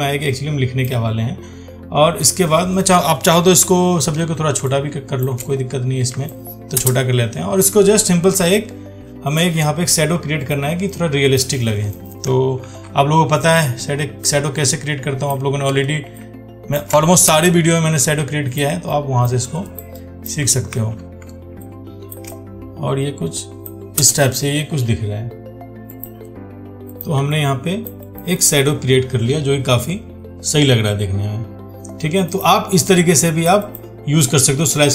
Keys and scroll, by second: 3.8 ctrl+t, 12.8 ctrl+t, 20.9 ctrl+t.